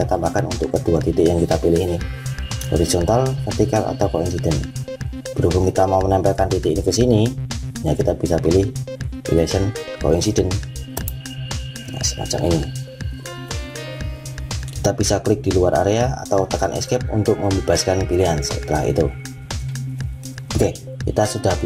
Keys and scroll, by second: 16.7 Escape.